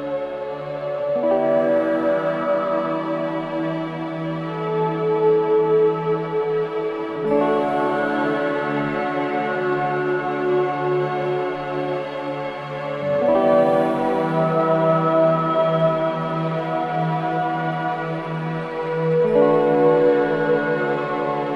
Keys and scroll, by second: 2.1 3, 5.0 4, 7.9 3, 8.6 ], 11.3 ], 12.3 4, 13.9 3, 14.2 ], 15.9 ], 20.7 ].